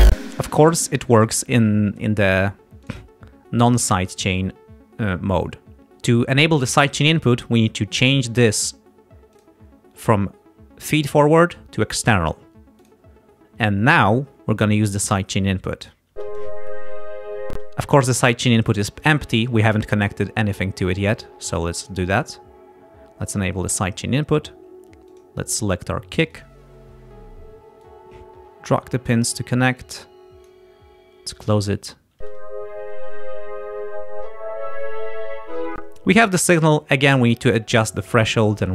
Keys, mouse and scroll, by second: 0.1 space, 2.9 click, 4.4 click, 9.4 click, 12.8 click, 16.1 space, 17.5 space, 21.8 click, 23.7 click, 25.1 click, 26.4 click, 27.8-29.4 drag, 29.8 click, 31.4 click, 32.2 space, 35.8 space.